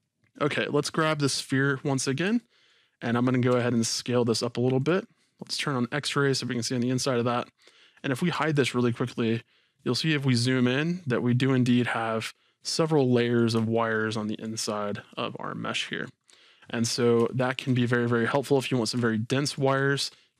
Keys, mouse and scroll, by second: 0.2-1.3 scroll down 2, 1.3 click, 2.4-3.2 shift+middle drag, 3.5 s, 4.8 click, 5.6 click, 6.2-6.6 scroll down 1, 6.6-20.3 middle drag, 8.0-8.3 scroll, 8.7-10.0 scroll up 2, 10.0-10.4 scroll down 2, 10.4-10.9 scroll up 2, 14.6-15.1 scroll down 2, 16.2-17.3 scroll down 2, 17.8-18.2 scroll up 2.